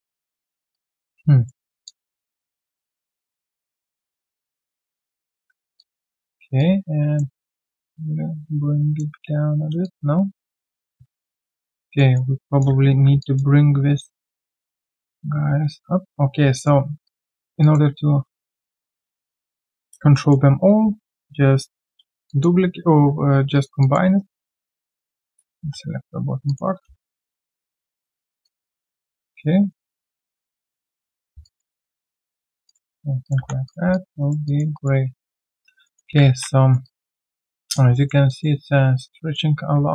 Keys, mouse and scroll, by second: 0.7 alt+click, 1.1 alt+right click, 1.8 alt+click, 2.8 alt+click, 3.9 alt+click, 4.9 ctrl+click, 5.3 alt+w, 5.8 alt+click, 7.4 alt+click, 9.2 ctrl+z, 9.8 alt+click, 11.6 alt+right click, 11.9 alt+middle click, 12.4 alt+click, 12.9 ctrl+1, 13.2 alt+click, 13.6 right click, 14.9 alt+click, 15.8 right click, 16.2-16.7 scroll down 1, 17.0 alt+click, 17.4 alt+right click, 17.6 alt+click, 18.7 alt+right click, 18.9 alt+click, 20.1 alt+middle click, 21.7 ctrl+alt+c, 22.3 alt+click, 22.5 q, 23.5 alt+right click, 23.8 alt+click, 24.2 alt+right click, 25.3 alt+click, 26.7 ctrl+1, 27.1 alt+right click, 27.4 alt+click, 27.8 alt+middle click, 28.4 alt+click, 29.7 alt+middle click, 31.4 alt+click, 31.6 q, 31.8 right click, 32.3-33.3 scroll down 1, 33.3 3, 33.6 double click, 34.2 alt+right click, 34.4 alt+click, 34.7 alt+right click, 35.8 alt+middle click, 36.3 ctrl+1, 36.6 alt+right click, 36.8 alt+click, 37.1 alt+right click, 37.4 alt+middle click, 37.6 alt+click, 37.9 alt+middle click, 38.3 alt+click, 39.2 alt+middle click.